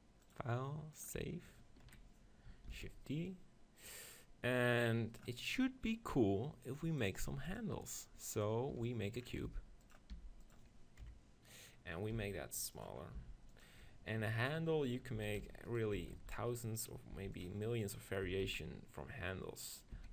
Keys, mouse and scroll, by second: 0.5-2.0 drag, 1.9 KP_3, 2.7 shift+d, 2.8-4.6 right drag, 3.3-5.1 drag, 7.3-9.0 drag, 9.5 g, 10.1 g, 11.0 KP_7, 12.2 s, 13.2 g, 13.7-15.6 drag, 14.2 ctrl+KP_7, 15.2 s, 15.8 right click, 16.0 s, 17.1 g, 18.3 s, 19.7-20.1 drag, 19.9 s.